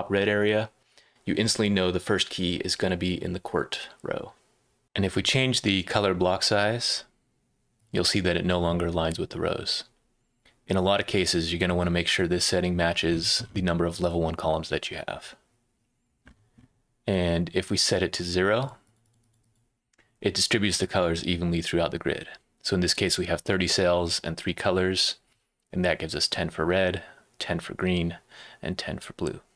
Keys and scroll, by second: 4.8 super+w.